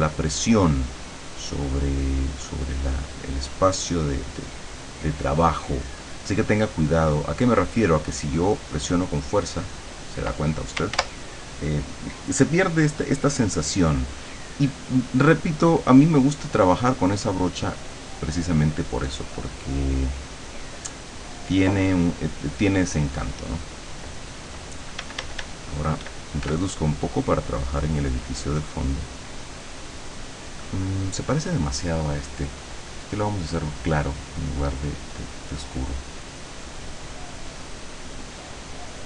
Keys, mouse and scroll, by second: 1.1-3.9 drag, 4.2 click, 5.4 click, 6.3 click, 8.0-9.3 drag, 8.3-9.3 right drag, 11.0 ctrl+z, 15.5 click, 17.9-20.2 drag, 20.7-22.5 drag, 25.1 d, 26.5 f, 26.8-31.4 drag, 32.7 click, 33.6 click, 35.7-38.8 drag.